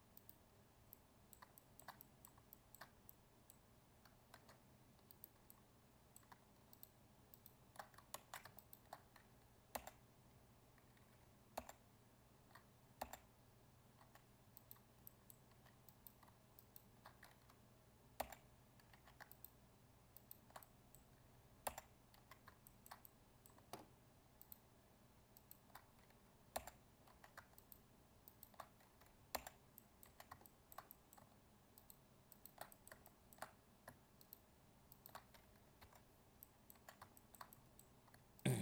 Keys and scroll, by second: 4.3 ctrl+Tab, 8.1 ctrl+z.